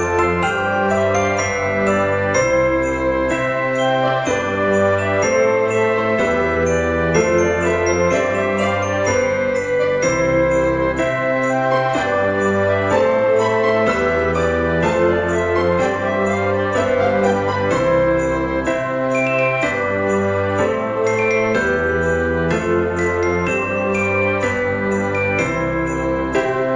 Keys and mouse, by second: 0.4 a, 1.7 click, 3.2 s, 4.8 click, 5.2 KP_7, 6.1 Tab, 7.1 middle click, 7.7 shift+middle click, 8.3 Tab, 8.9 click, 9.2 l, 10.6 KP_7, 11.7 o, 12.5 shift+d, 13.5 click, 13.6 r, 14.5 click, 14.9 s, 15.5 click, 15.7 g, 16.3 click, 16.5 r, 17.4 click, 17.7 middle click, 18.2 g, 18.3 z, 19.6 click, 20.2 KP_7, 21.1 g, 22.5 click, 22.6 r, 23.7 click, 24.0 g, 24.9 click, 25.4 shift+d, 26.2 click, 26.3 r.